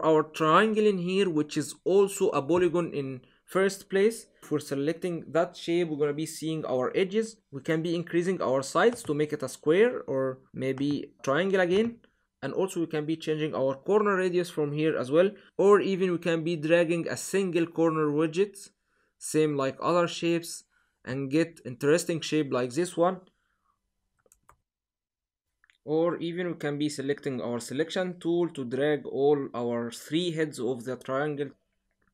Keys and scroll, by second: 24.3 super+z.